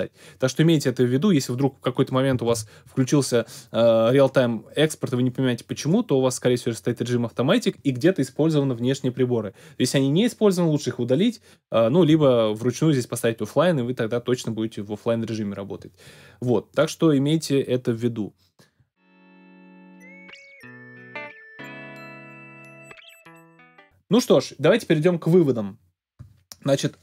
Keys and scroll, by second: 2.5 super+b.